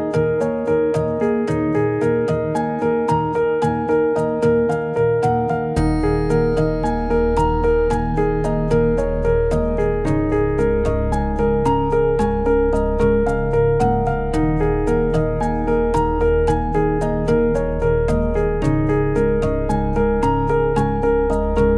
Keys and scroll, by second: 3.3 b, 5.9 b, 15.6 space, 17.2 ctrl+z, 17.9 ctrl+z.